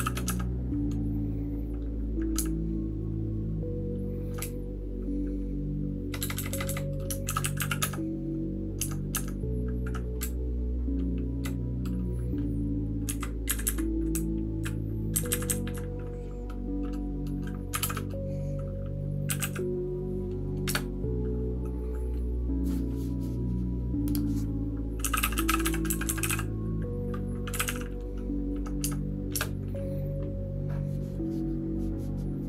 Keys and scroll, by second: 11.0-12.8 typing, 13.1 shift+Tab, 13.1 Down, 13.5 Up, 13.6 Up, 14.1 Down, 15.1 Up, 15.3 Up, 15.4 Up, 15.6 Up.